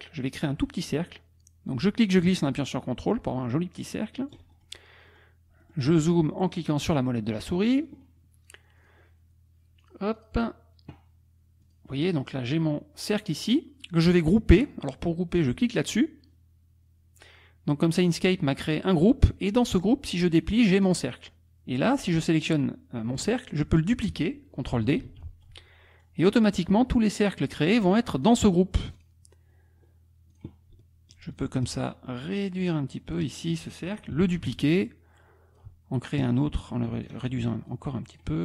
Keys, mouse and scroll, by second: 1.7-4.5 drag, 4.7 ctrl+click, 5.1 click, 5.6 click, 8.8 click, 9.8 click, 10.2 click, 11.6 click, 12.1 click, 15.8 click, 19.3 click, 20.9 click, 25.0 ctrl+d, 25.2 ctrl+click, 25.5-25.9 scroll down 2, 27.6 click, 28.3 click, 29.0 click, 30.3 click, 31.3 ctrl+click, 31.8-33.3 ctrl+drag, 34.2 ctrl+d, 34.8 ctrl+click, 36.2 ctrl+click, 37.7 click.